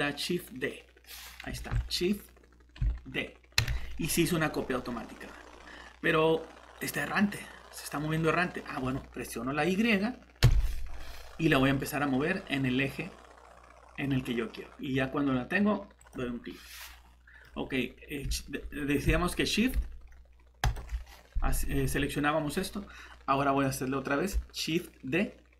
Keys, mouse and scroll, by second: 1.5 shift+Escape, 10.4 shift+y, 16.8 middle click, 20.6 click.